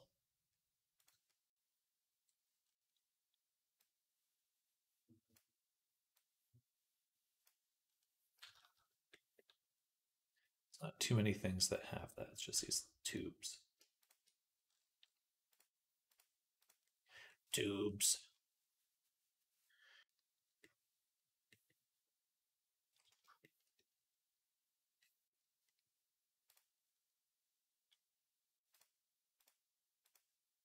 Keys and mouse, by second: 3.7-13.0 drag, 3.7-13.0 middle drag, 15.4-23.4 drag, 15.4-23.4 middle drag, 24.8-26.4 drag, 24.8-26.4 middle drag, 24.8-30.6 right drag, 28.6 click, 28.6 middle click.